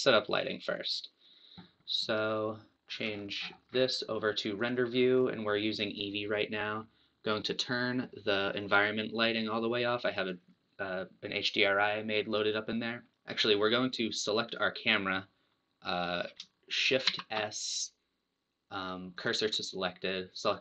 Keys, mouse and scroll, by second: 9.7-12.9 drag, 12.9 scroll down 2, 13.1-14.7 middle drag, 14.7 click, 19.2 shift+s, 20.5 click.